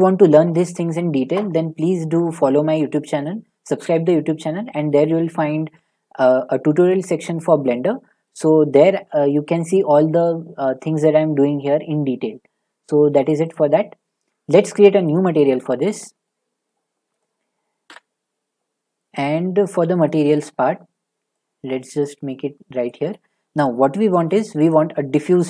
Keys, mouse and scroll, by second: 3.6 click, 7.4 click, 8.3 shift+middle click, 8.9 middle click, 13.5 click, 15.1 click, 16.6 middle click, 17.2 click, 17.9 Delete, 18.6 middle click, 18.7 middle click, 19.2 middle click, 19.3 middle click, 19.6 middle click, 19.7 middle click, 20.3-20.9 shift+middle click, 21.9 scroll, 22.9 click, 23.6 click, 24.2 a, 24.7 click, 25.2-25.4 typing.